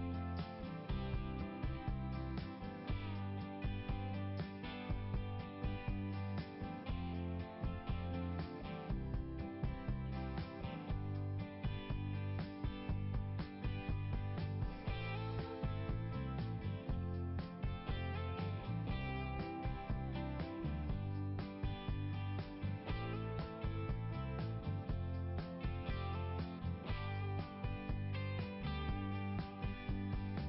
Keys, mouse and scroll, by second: 4.0 scroll down 1, 6.0-6.4 scroll up 1, 8.2 right click, 8.5 right click, 10.3 click, 11.3 right click, 12.9 click, 15.7 scroll down 1, 17.1 click, 18.3 click, 19.9 click, 22.4 click, 24.1 click, 24.6 right click, 25.7 click, 27.5 click, 28.8 click.